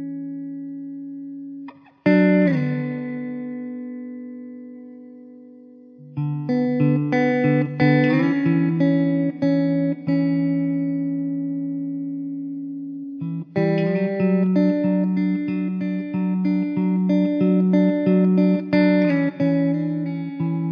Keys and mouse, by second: 0.0 middle click, 9.4-9.7 typing, 10.9 1, 13.7 F4, 14.1 middle click, 15.3 alt+w, 15.8 z, 17.0 alt+middle click, 19.1 w.